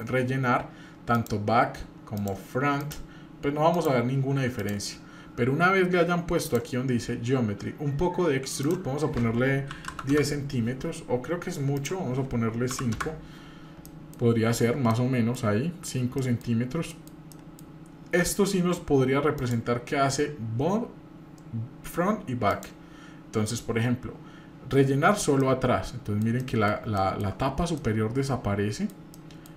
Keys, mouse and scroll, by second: 2.1-2.9 drag, 3.7-4.6 drag, 6.4 click, 7.1-8.6 scroll down 1, 8.6-10.6 drag, 11.8-13.3 drag, 13.9 middle drag, 14.6 scroll up 1, 14.9 middle click, 16.2 middle drag, 16.6 scroll up 2, 16.9 middle click, 17.3 middle click, 19.4-22.6 drag, 25.4-26.3 middle drag, 26.4-26.7 middle drag, 27.0-27.3 shift+middle drag, 27.4-27.7 scroll up 1, 27.7-29.5 shift+middle drag.